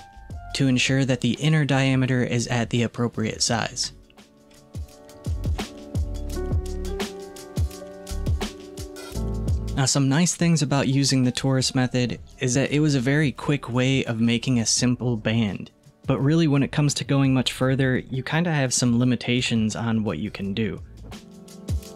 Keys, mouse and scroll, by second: 3.5-5.2 scroll up 1, 5.5 alt+z, 5.9-6.3 scroll down 4, 6.3-7.4 middle drag, 7.4-8.0 scroll up 1, 8.0-8.8 scroll up 1, 14.2-16.5 middle drag, 16.5 click.